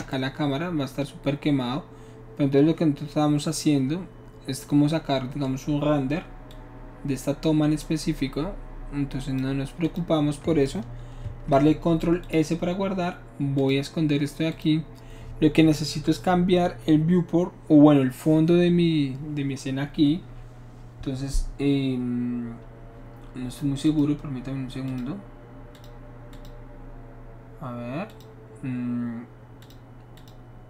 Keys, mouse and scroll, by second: 6.5-9.4 drag, 9.9 click, 11.2 ctrl+s, 12.3 click, 13.6 click, 14.5 click, 23.9 click, 24.9 click, 25.8 click, 26.3 click, 28.1 click, 29.6 click, 30.2 click.